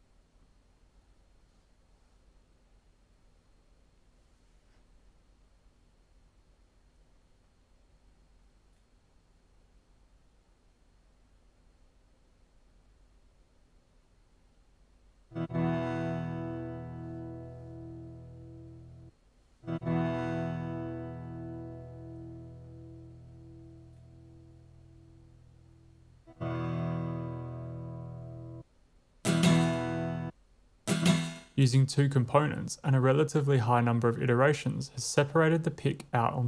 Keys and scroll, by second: 6.7-8.2 typing, 9.2 typing, 12.4 super+x, 14.7 w, 15.2 space, 19.0-19.5 typing, 28.5 space, 29.1 w, 30.2 space, 30.5 w, 30.8 space.